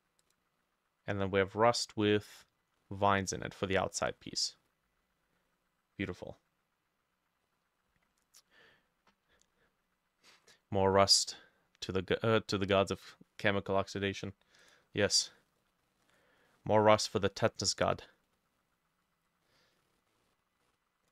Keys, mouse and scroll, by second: 3.2 middle click, 3.3-3.6 scroll down 1, 15.3 middle click, 15.7 scroll down 1, 16.0 middle click.